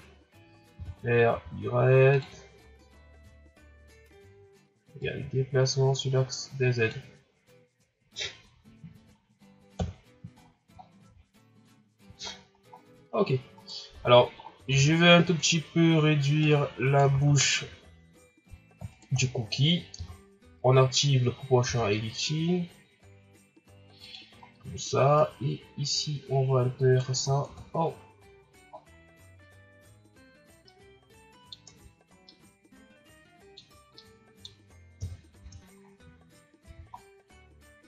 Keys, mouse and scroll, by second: 0.8 r, 5.0-8.0 drag, 9.1-9.7 scroll down 4, 9.7 KP_1, 10.4-10.9 scroll down 6, 11.3-11.7 scroll up 5, 12.3-12.9 shift+scroll down 6, 13.2 scroll up 4, 13.5 right click, 14.1 scroll down 3, 14.5 scroll up 1, 14.7 Tab, 15.6 scroll up 2, 16.4 right click, 17.1 ctrl+z, 18.9 shift+right click, 19.9 o, 21.6 g, 24.4 ctrl+scroll down 3, 25.1 right click, 27.3 scroll down 3, 27.4 Tab, 28.2-28.7 scroll down 1, 28.7 scroll up 4, 30.7-31.7 middle drag, 31.7 Tab, 32.2-35.0 middle drag, 35.0 KP_1, 35.4 Tab, 35.8-36.2 scroll down 6, 36.6 a, 36.9 scroll down 2, 37.5-37.8 scroll up 4.